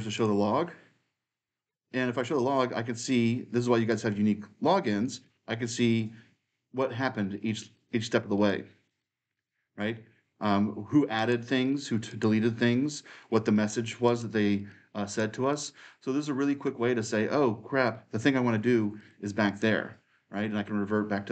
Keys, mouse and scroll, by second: 3.7-17.4 drag, 18.8-21.3 drag.